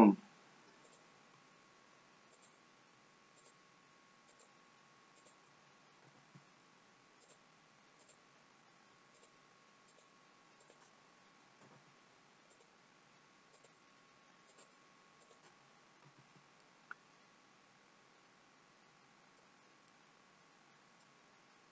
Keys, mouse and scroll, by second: 0.9 click, 2.4 click, 3.4 shift+click, 4.3 shift+click, 5.4 shift+click, 6.0 f, 7.3 click, 8.1 click, 9.2 shift+click, 9.9 shift+click, 11.8 f, 12.6 click, 13.6 click, 14.5 shift+click, 15.5 shift+click, 16.1 f, 16.7 middle click, 20.0 middle click.